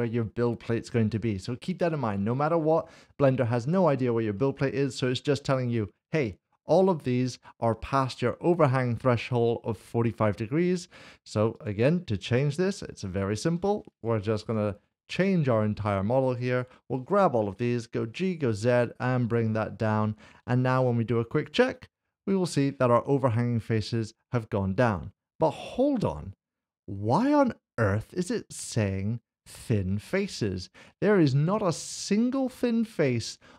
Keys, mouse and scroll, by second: 1.5 middle click, 4.4 middle click, 11.5 middle click, 13.9 click, 14.4 alt+click, 15.3 middle click, 16.5 shift+click, 17.6 g, 18.1 z, 21.4 click, 30.4 click, 30.6 middle click.